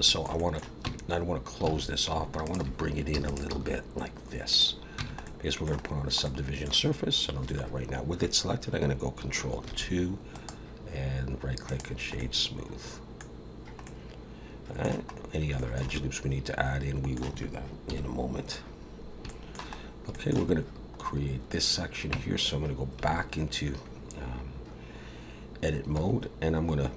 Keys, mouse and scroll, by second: 0.0 shift+middle click, 0.4 middle click, 0.8 Tab, 1.7 alt+a, 2.4 alt+shift+click, 3.1 e, 3.5 s, 5.0 Tab, 5.2 middle click, 5.9 scroll down 1, 6.2 middle click, 9.7 ctrl+2, 10.3 right click, 12.2 middle click, 13.3-13.8 scroll down 1, 13.8 middle click, 15.1 scroll up 1, 15.6 shift+middle click, 15.9 middle click, 17.9 KP_1, 18.7 scroll up 2, 19.3 shift+middle click, 19.8 scroll up 1, 20.1 shift+middle click, 21.0-21.6 scroll up 2, 22.1 Tab, 23.1 alt+a, 25.9 2.